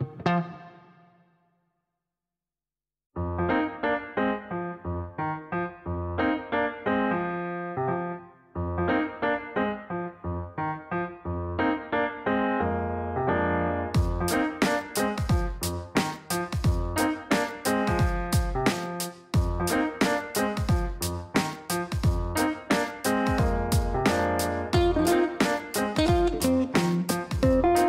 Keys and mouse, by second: 2.8-3.7 typing, 3.9 Down, 4.1 Down, 4.4 Return, 5.8 click, 6.8 click, 8.5 click, 8.9 click, 10.0 click, 10.5 click, 11.6-14.3 typing, 14.3 Down, 14.6 Return, 14.8 Return, 16.0 click, 17.3 click, 18.7 click.